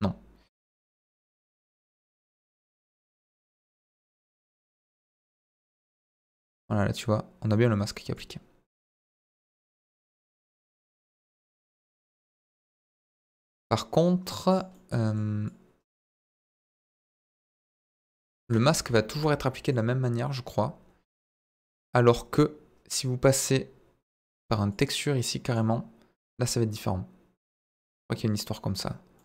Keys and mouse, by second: 0.5 click, 1.2 click, 1.9 click, 3.1 click, 4.1 click, 5.1 ctrl+z, 5.6 ctrl+z, 6.1-7.9 drag, 8.1-9.4 drag, 9.6 click, 11.1 ctrl+z, 11.3 ctrl+z, 12.2 ctrl+z, 12.8 middle click, 13.2-14.5 drag, 14.7 middle click, 15.4-16.7 drag, 17.0 middle click, 17.4 click, 18.2 middle click, 18.6 ctrl+z, 18.8 ctrl+z, 19.1 ctrl+z, 19.7-21.5 drag, 24.7 click, 27.6 click, 29.1 middle click.